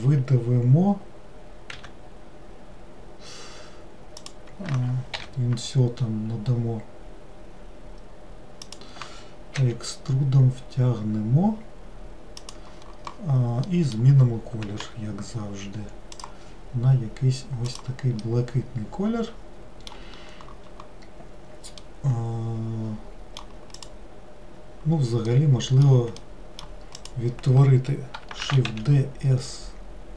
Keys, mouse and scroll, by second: 1.8 e, 9.6 e, 13.7-14.9 middle drag, 14.9 g, 17.7 click, 18.3-21.3 middle drag, 21.9-23.8 middle drag, 23.8 click, 25.3-27.1 middle drag, 27.1 click, 28.5 shift+d.